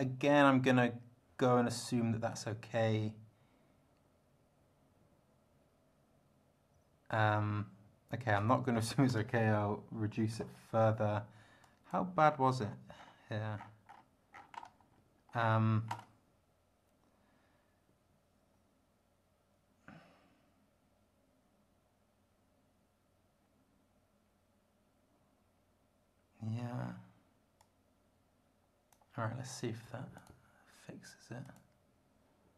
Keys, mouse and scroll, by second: 8.8 Left, 9.1 BackSpace, 10.3 3, 11.6 click, 12.3-13.2 scroll down 6, 13.5 scroll down 2, 13.9 scroll up 2, 14.3-15.1 scroll down 4, 15.3 scroll up 2, 27.6-29.1 drag, 30.1 click, 31.4 click.